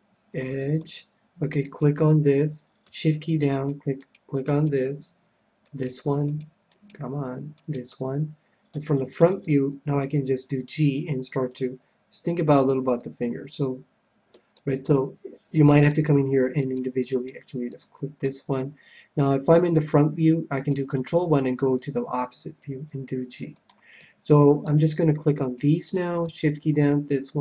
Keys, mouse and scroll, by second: 0.7-2.4 drag, 0.7 middle click, 1.7 middle click, 1.7-3.5 right drag, 4.4-9.1 right drag, 8.7 KP_1, 9.1 click, 10.1 g, 12.6-14.3 drag, 12.9-17.2 middle drag, 17.0-18.6 right drag, 17.7-19.3 middle drag, 18.8 right click, 19.4 middle click, 19.7 KP_1, 20.9 ctrl+KP_1, 22.6 g, 23.6-25.4 drag, 24.0-25.6 middle drag, 25.4-27.4 right drag.